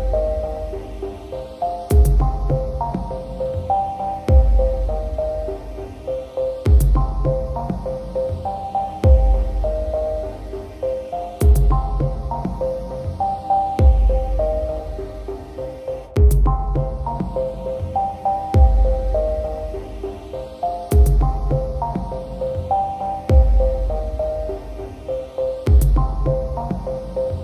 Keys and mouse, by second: 0.0 right click, 0.4 right click, 0.7 right click, 1.6 right click, 2.3 right click, 2.5 right click, 3.3 right click, 3.8 right click, 4.3 right click, 4.6 right click, 5.8 right click, 6.5 right click, 6.7 right click, 7.1 right click, 7.5 right click, 7.8 right click, 8.8 right click, 9.9 right click, 10.7 right click, 10.9 right click, 11.1 right click, 12.3 right click, 13.3 right click, 13.9 right click, 14.5 right click, 15.0 right click, 15.4 right click, 16.4 right click, 16.7 right click, 17.7 right click, 18.6 right click, 19.1 right click, 19.3 right click, 19.6 right click, 20.2 right click, 20.5 right click, 20.7 right click, 21.2 right click, 22.1 right click, 22.3 right click, 23.0 right click, 24.8 right click, 25.2 right click, 26.2 right click, 26.4 right click, 26.9 right click.